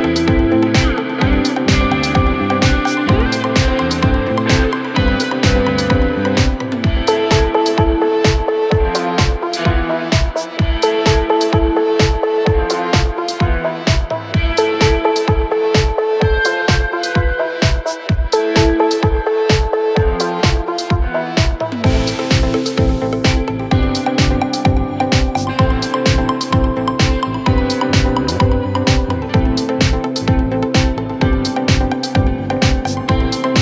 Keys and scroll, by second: 0.0-1.8 typing, 0.1 Return, 3.1 BackSpace, 30.1 F3.